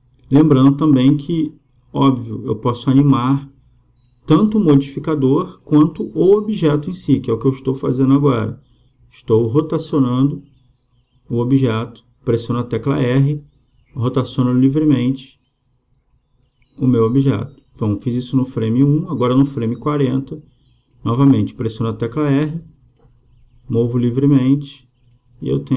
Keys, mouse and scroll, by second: 4.2-6.0 drag, 5.7 r, 11.1 r, 15.5 r, 19.1-20.7 drag, 24.9 r.